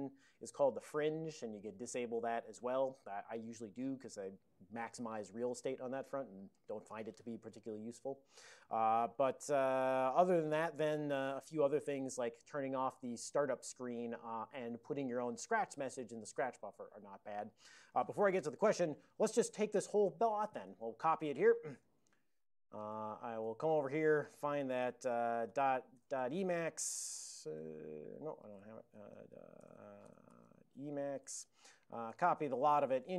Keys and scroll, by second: 9.1 super+j, 12.2 ctrl+n, 12.3 ctrl+n, 14.3 ctrl+n, 19.8 ctrl+n, 19.9 ctrl+n, 20.7 ctrl+space, 20.8 ctrl+p, 21.3 ctrl+p, 21.6-22.8 ctrl+p, 22.8 alt+w, 23.5 super+j, 28.2 ctrl+x, 28.5 b, 31.9-32.7 typing, 32.8 ctrl+o.